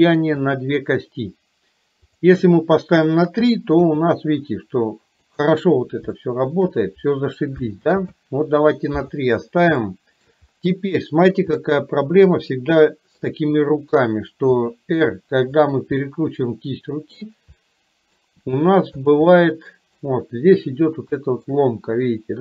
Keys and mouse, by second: 0.5 click, 3.9 g, 6.3-6.8 shift+middle drag, 7.9 ctrl+z, 9.9-10.4 shift+middle drag, 11.6-12.4 middle drag, 12.5-13.4 middle drag, 14.6 r, 16.1-17.3 middle drag, 17.6-18.3 middle drag, 18.5 r, 19.4-20.0 middle drag, 21.3-21.6 shift+middle drag.